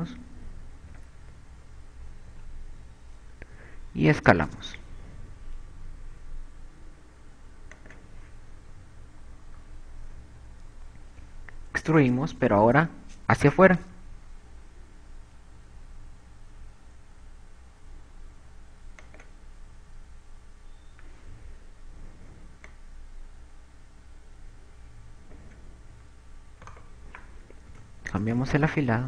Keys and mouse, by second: 0.1 e, 4.5 s, 9.2 click, 9.8 KP_8, 10.0 KP_8, 10.8 KP_4, 11.5 KP_4, 14.0 KP_4, 14.2 KP_4, 15.1 e, 20.1 click, 23.7 click, 27.3 a, 27.7 right click, 28.5 shift+e.